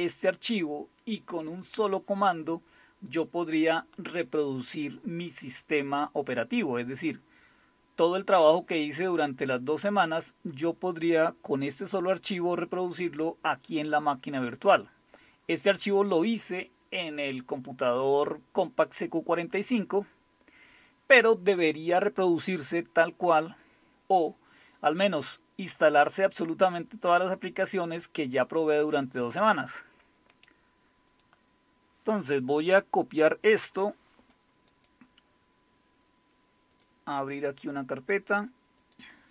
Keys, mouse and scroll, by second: 25.1-28.6 scroll down 2, 28.6-29.4 scroll down 1, 29.4 scroll down 1, 30.3 click, 31.1 click, 34.7-36.7 right drag, 36.7 click, 38.8 click.